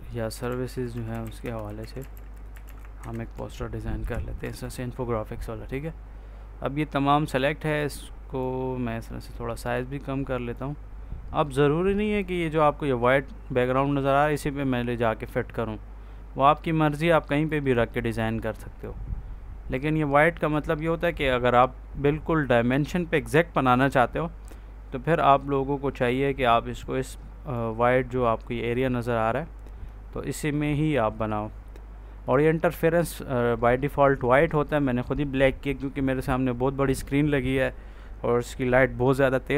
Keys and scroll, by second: 0.0-3.0 typing, 3.9 ctrl+v, 4.3 F4.